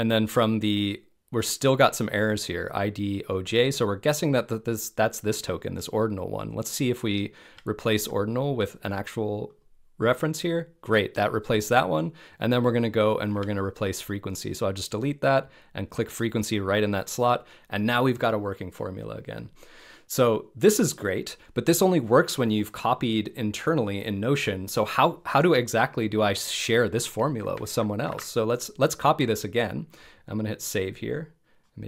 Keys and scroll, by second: 7.4 BackSpace, 13.3 BackSpace, 27.7 super+a, 28.1 super+c.